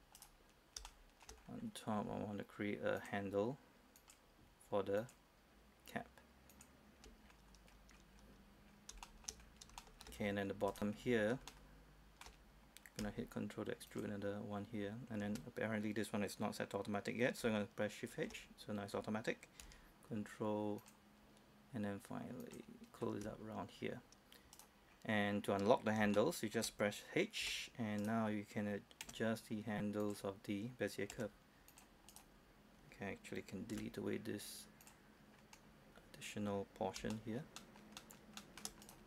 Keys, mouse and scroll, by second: 0.2 right click, 0.9 shift+middle click, 1.5-2.1 scroll up 1, 3.1 ctrl+click, 5.1 ctrl+click, 7.3-7.8 scroll down 1, 8.4 scroll up 1, 8.7 scroll down 1, 9.1 shift+middle click, 9.5 scroll up 1, 9.9 shift+middle click, 10.3-10.8 scroll up 1, 10.8 right click, 11.6 shift+middle click, 14.0 ctrl+click, 18.2 shift+h, 20.9 ctrl+click, 23.6-24.6 scroll up 1, 24.6 right click, 25.0 scroll down 1, 25.3 scroll up 1, 25.5-26.1 scroll down 1, 26.2 shift+middle click, 27.5 shift+h, 28.1 right click, 29.1 g, 30.1 click, 31.2 g, 31.8 click, 32.2 right click, 33.8 x, 34.9 click, 35.4 scroll down 1, 35.7 scroll up 1, 35.9-37.1 scroll down 1, 37.2 shift+middle click, 37.7 shift+middle click, 38.1 shift+middle click, 38.9 right click.